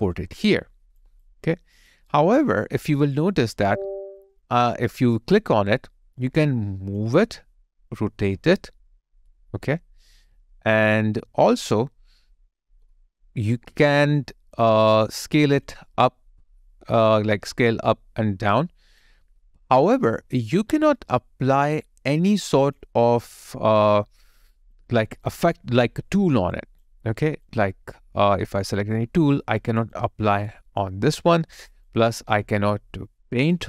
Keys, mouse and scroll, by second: 1.8 double click, 2.2 alt+right click, 2.7 alt+middle click, 3.4 alt+double middle click, 25.4 double click.